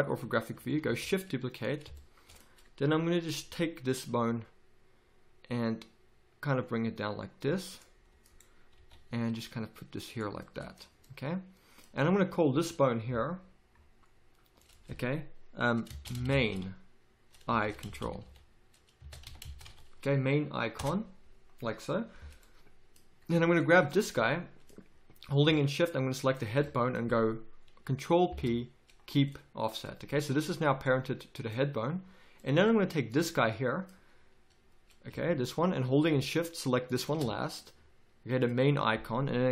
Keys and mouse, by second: 0.8 shift+d, 4.3 g, 8.7 g, 14.6-20.8 drag, 23.4 click, 28.3 ctrl+p, 35.1 z.